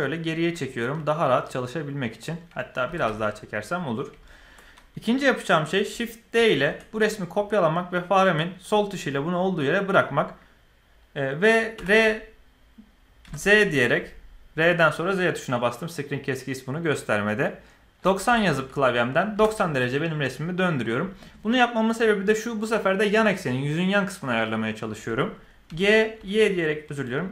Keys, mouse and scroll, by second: 0.9-2.2 middle drag, 2.8 g, 4.2 shift+middle drag, 6.3 shift+d, 11.7 r, 25.6 g.